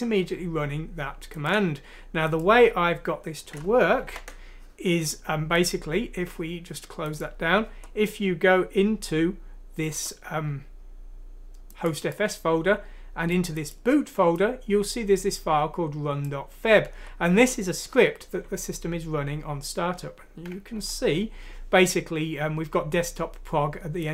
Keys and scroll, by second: 4.1 ctrl+End.